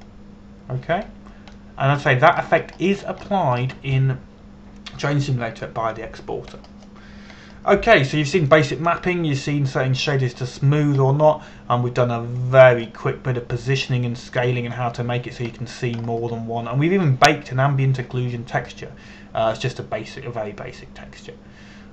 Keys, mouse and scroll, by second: 1.6 click, 2.8-3.2 scroll down 1, 3.2 middle click, 4.4-4.7 scroll up 1, 4.9 shift+middle click, 8.2-9.8 scroll down 1, 10.1-12.0 middle drag, 14.1-16.4 drag, 17.2-17.7 scroll down 1, 17.7-20.0 scroll up 1.